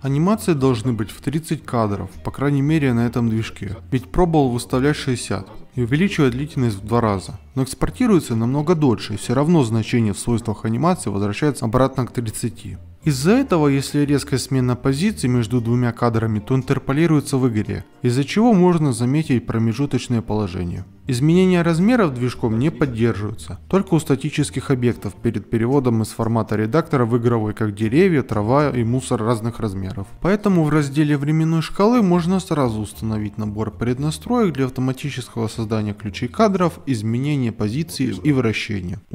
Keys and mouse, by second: 0.2 click, 0.4 ctrl+Tab, 0.9 middle click, 1.5 middle click, 3.6 click, 6.4 click, 7.3 ctrl+z, 10.1 Tab, 10.8 ctrl+z, 11.1 ctrl+Tab, 11.5 ctrl+Tab, 11.6 a, 14.5 shift+click, 15.3 a, 15.5 s, 15.8 KP_2, 16.2 ctrl+alt+Tab, 16.5 middle click, 18.5 middle click, 18.9 middle drag, 20.3-21.1 middle drag, 22.4 Escape, 23.0 alt+shift+z, 23.6 click, 24.0 s, 24.9 click, 25.7 click, 26.2 middle click, 26.5 g, 27.2 i, 28.5 ctrl+z, 29.3 r, 29.8 i, 31.3 click, 31.8 shift+click, 32.3 Delete, 32.7-34.1 ctrl+z, 35.7-38.2 drag.